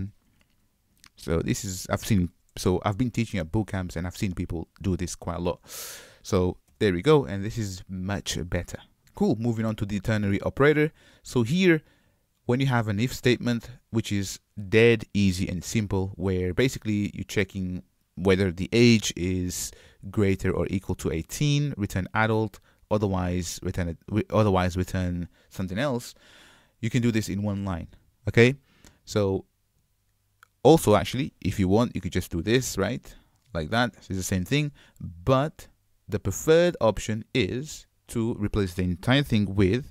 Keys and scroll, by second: 5.5 super+y, 35.4 super+z.